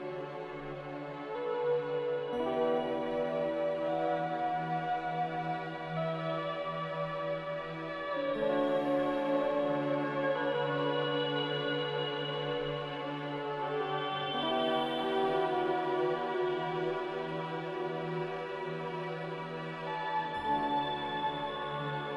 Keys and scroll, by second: 7.7-9.5 typing.